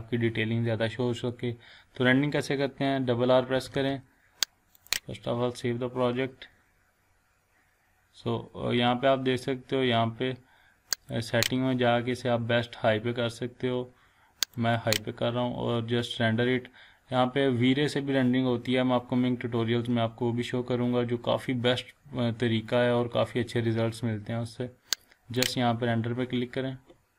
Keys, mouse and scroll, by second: 3.6 r, 3.7 r, 4.7 click, 10.9 click, 16.3 click, 22.2 scroll down 1, 22.9-23.3 scroll up 1, 23.7 scroll down 1, 25.4 click.